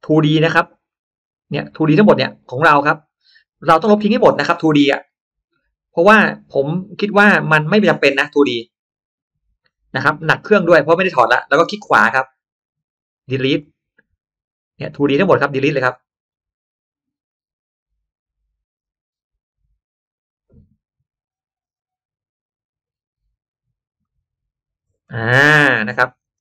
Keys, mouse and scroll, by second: 0.8-1.3 scroll down 4, 1.5-1.9 scroll up 2, 3.9-4.5 scroll down 2, 6.1 right click, 7.7 click, 9.1 right click, 10.8 click, 11.5 click, 11.9 right click, 13.5 click, 14.5 right click, 15.8 click, 17.1 right click, 19.7 click, 22.4 right click, 23.9 click, 25.1-25.7 scroll up 2, 25.5 middle click, 26.3 space.